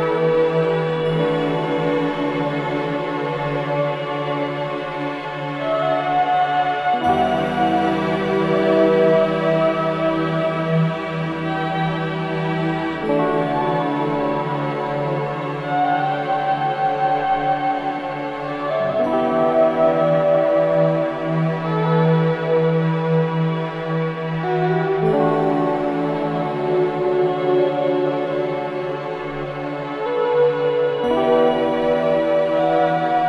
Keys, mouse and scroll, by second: 1.6 scroll up 1, 3.4 ctrl+b, 5.0-10.5 drag, 14.3-16.9 drag, 16.9 3, 17.5 3, 20.2-26.6 drag, 29.7-31.1 right drag, 31.1 scroll down 1, 31.6 alt+middle click, 32.1-32.6 scroll up 1, 32.6-33.2 alt+scroll up 2, 32.7 alt+middle click.